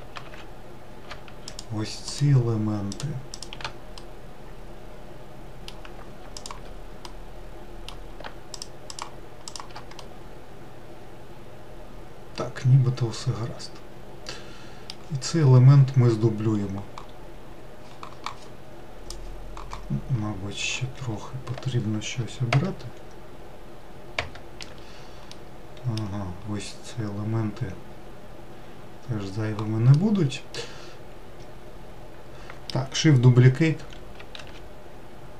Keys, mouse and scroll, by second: 0.8 shift+click, 1.4 shift+click, 2.3 shift+click, 2.7 shift+click, 3.4-5.7 middle drag, 5.7 shift+click, 6.4-7.9 middle drag, 7.9 shift+click, 8.2 shift+click, 8.8 shift+click, 9.3-12.4 middle drag, 15.1-17.1 scroll down 8, 19.7-23.0 scroll up 8, 24.8 scroll up 1, 24.9-28.0 middle drag, 29.5-32.6 middle drag, 32.6-33.7 scroll down 6, 34.0 shift+d.